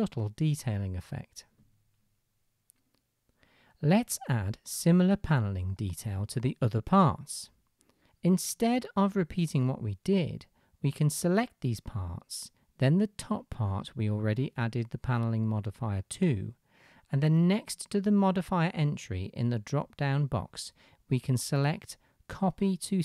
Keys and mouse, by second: 8.1-9.1 middle drag, 8.1-9.1 right drag, 11.5 shift+middle drag, 11.5 shift+right drag, 20.5-23.0 middle drag, 20.5-21.7 right drag.